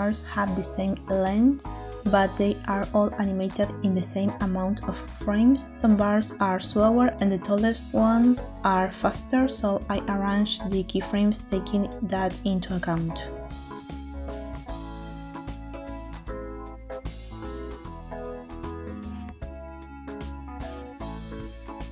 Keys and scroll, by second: 15.9 space, 19.3 space.